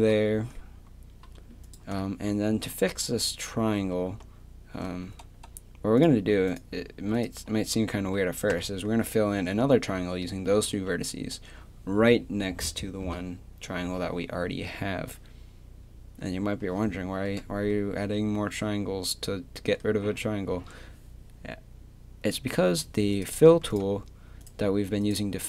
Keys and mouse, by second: 2.5 a, 6.0-8.5 right drag, 8.5 f, 10.7 a, 23.1-25.4 drag.